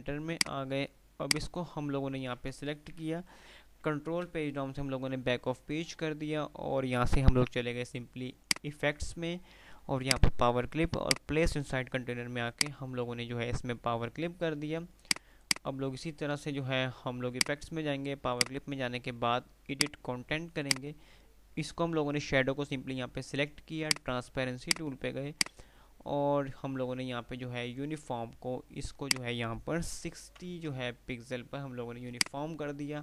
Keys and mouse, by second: 1.7 click, 2.4 ctrl+z, 4.1 shift+Page_Down, 8.5 click, 23.8 click, 29.1 click, 32.3 click.